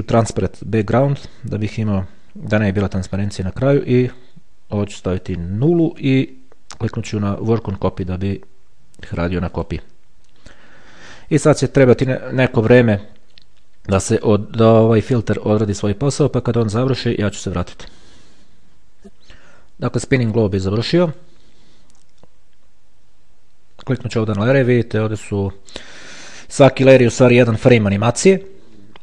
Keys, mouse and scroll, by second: 5.1 click, 6.1 KP_0, 9.7 click, 19.1 click, 21.3 click, 24.1 click, 25.0-26.6 scroll down 1, 26.6-27.4 scroll down 1, 27.4-28.1 scroll down 1, 28.1 scroll down 1, 28.2-29.0 scroll up 2.